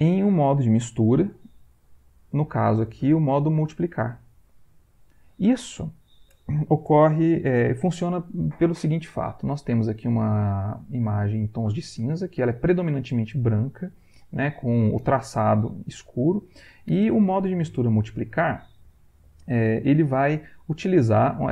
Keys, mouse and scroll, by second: 2.0 click, 3.9 click.